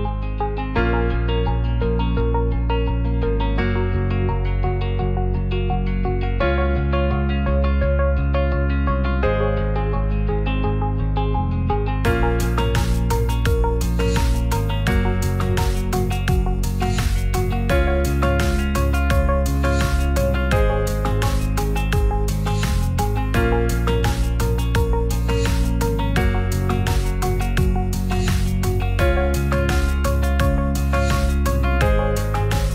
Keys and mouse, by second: 2.0 click, 2.7 click, 4.7 g, 4.8 z, 6.5 click, 9.6 middle click, 10.2-13.1 middle drag, 13.1 click, 16.9 s, 18.1-19.7 drag, 20.1 s, 31.5 shift+s, 31.9-32.7 middle drag.